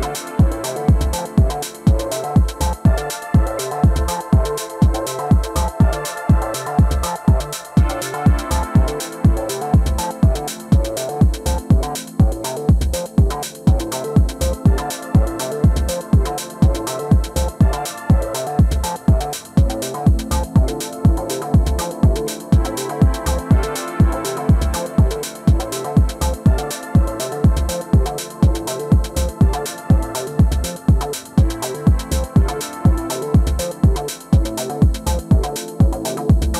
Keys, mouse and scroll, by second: 2.3-5.4 middle drag, 4.8 KP_3, 6.1 Tab, 6.6-8.1 middle drag, 8.1 shift+a, 11.1 Tab, 11.6 s, 13.7 r, 15.0 g, 16.1-17.9 middle drag, 19.4 alt+s, 21.6 middle click, 25.2 Tab, 27.8-31.2 right drag, 31.9-33.7 drag, 33.9-35.8 drag, 34.7-36.4 middle drag.